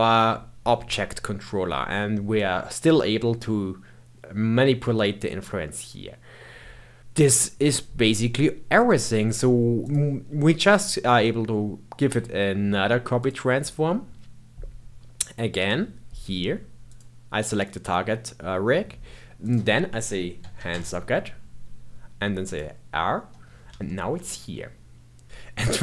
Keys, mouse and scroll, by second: 2.3-5.4 drag, 8.7-12.9 drag, 15.5 click, 19.4-22.5 drag, 23.8-25.2 shift+middle drag, 25.2-25.8 drag.